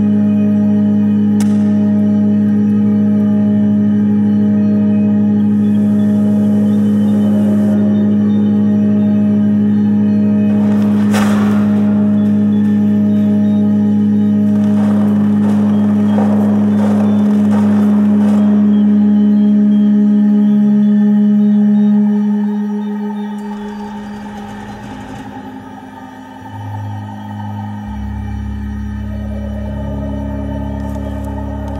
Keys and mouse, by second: 1.1-1.8 drag, 3.7 click, 4.4 click, 5.7 click, 10.8 click, 13.8 shift+a, 19.2-22.0 drag, 25.9 click, 26.9-28.1 drag, 28.8-31.7 drag.